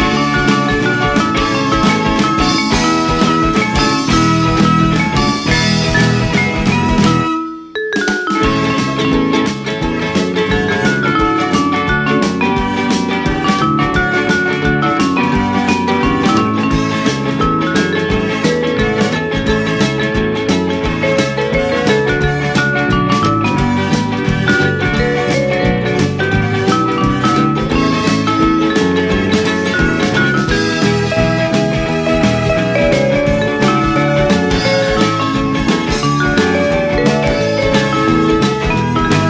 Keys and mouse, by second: 1.1 KP_1, 2.1 r, 3.9 click, 4.4 r, 5.0 click, 5.1 r, 6.1 click, 6.7 g, 7.3 click, 7.7 Tab, 8.1 a, 9.0 shift+d, 10.2 click, 10.3 r, 12.0 r, 13.1 click, 13.6 g, 14.5 click, 15.3 shift+d, 16.0 click, 16.3 r, 17.0 click, 17.4 ctrl+a, 18.8 right click, 19.3 r, 20.7 click, 20.8 g, 21.8 click, 21.9 r, 24.4 click, 24.6 g, 25.9 click, 26.9 shift+d, 27.6 click, 27.7 r, 30.4 click, 30.9 g, 32.0 click, 32.1 r, 33.0 click, 33.3 g, 33.7 click, 34.1 middle click, 37.0 click, 37.6 middle click.